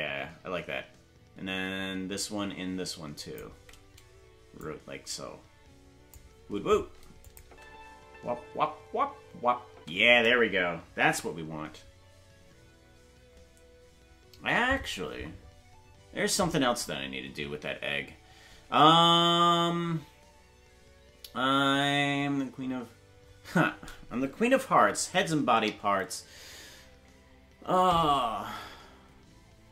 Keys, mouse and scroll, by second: 4.5-6.1 drag, 7.2 click, 7.4 space, 12.8 ctrl+s, 12.8 space.